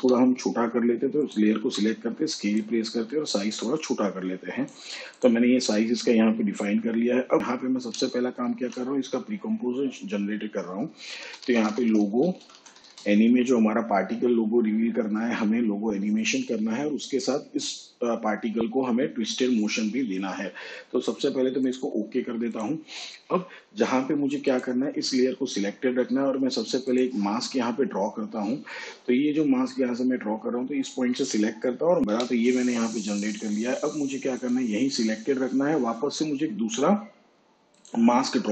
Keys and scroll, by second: 1.5 s, 8.4 ctrl+shift+c, 10.9-13.3 typing, 32.0 Left.